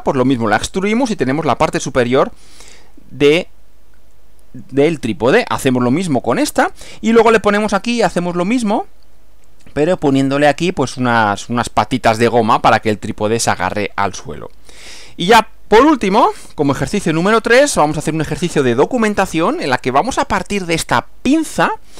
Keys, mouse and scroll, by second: 2.1 Left, 14.9 Right, 16.1 Right.